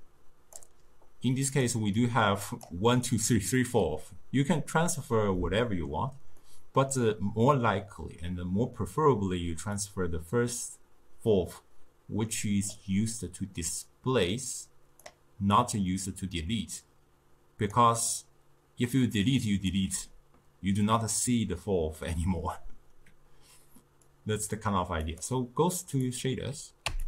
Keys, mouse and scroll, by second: 1.6 click, 2.0-5.1 drag, 5.4-9.5 middle drag, 9.9 click, 13.8 click, 15.6 click, 19.2-22.3 drag, 24.1-26.9 drag, 26.9 q.